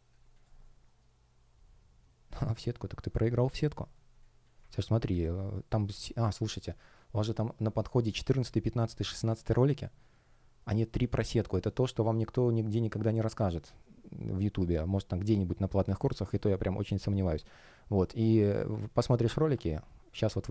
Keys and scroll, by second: 0.4 shift+o.